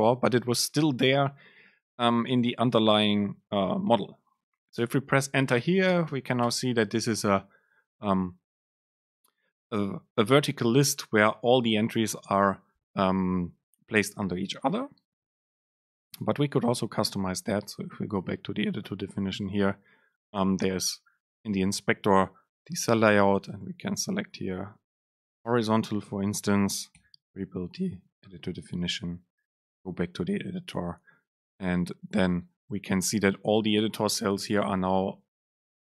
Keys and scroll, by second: 4.9 Return, 23.5 super+space, 27.0 ctrl+shift+super+F9.